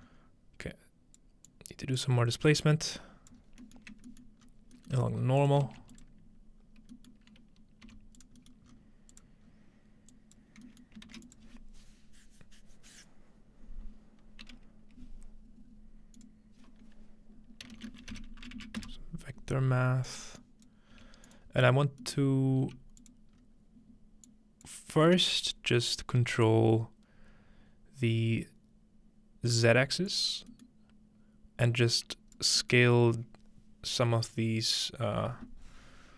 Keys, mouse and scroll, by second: 0.1 scroll up 2, 0.7 click, 1.5-2.0 drag, 3.0 click, 3.4-4.0 scroll down 1, 4.0-4.5 scroll up 2, 5.2-6.0 scroll up 2, 5.4 click, 5.7 shift+d, 6.0 click, 6.6-6.9 scroll down 2, 7.3 scroll up 2, 7.9 g, 8.2 click, 8.6-10.6 drag, 8.6-9.5 scroll up 1, 11.1 shift+a, 11.3 click, 16.2-17.5 drag, 17.7-18.9 typing, 20.1 click, 20.4 click, 20.9 g, 21.3 click, 21.5-23.1 scroll down 2, 22.2 middle click, 22.8 g, 23.0 click, 23.3-25.1 scroll up 1, 24.3 click, 29.5 click, 30.1 click, 31.8-32.4 drag.